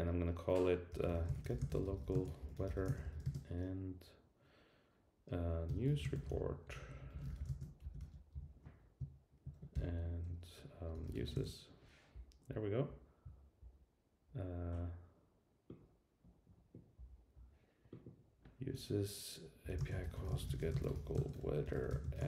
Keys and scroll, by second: 9.7 ctrl+i.